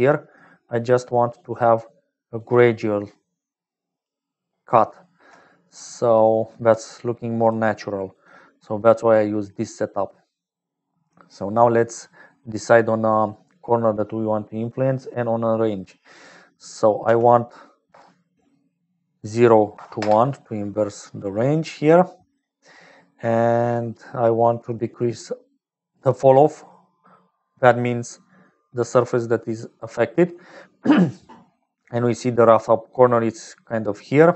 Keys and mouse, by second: 0.0-34.3 typing, 0.4 click, 2.3-3.9 drag, 4.5-5.5 drag, 5.9 click, 7.1 click, 7.8 click, 10.9 click, 13.5 click, 16.2-18.6 drag, 19.1-20.9 drag, 21.9 click, 22.6 click, 24.0-29.5 shift+drag, 31.4-33.8 middle drag, 33.8 click.